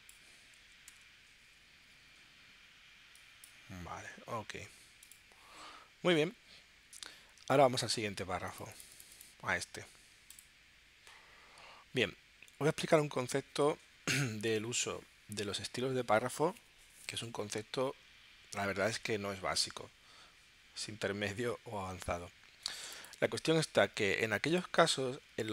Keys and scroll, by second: 0.6 4, 0.9 0, 1.6 Tab.